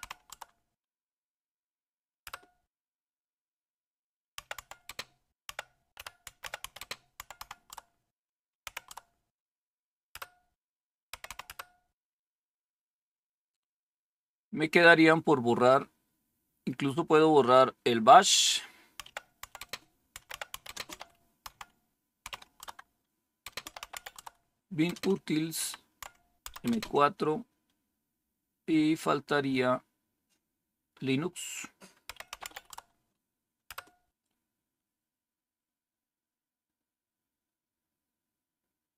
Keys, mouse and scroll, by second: 0.0-0.7 typing, 1.8-2.7 typing, 4.1-10.2 typing, 11.2 typing, 13.0-16.2 scroll up 1, 17.8-18.9 scroll down 1, 18.9-27.1 typing, 22.5 Tab, 28.9-30.6 scroll up 1, 30.8-32.0 scroll down 1, 32.1-33.6 typing.